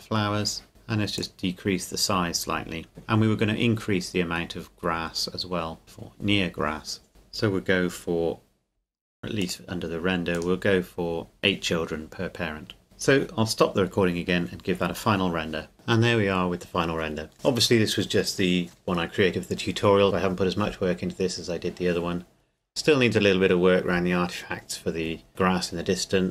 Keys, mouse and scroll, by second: 3.6 scroll up 1, 5.8 click, 9.4 click, 11.4 KP_Enter, 12.8 click, 15.7 click.